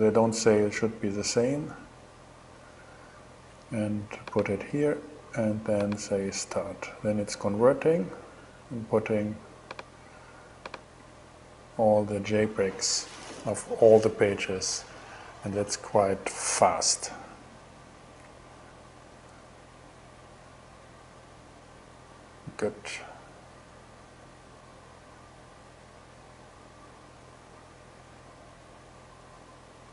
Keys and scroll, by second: 16.3 super+Tab.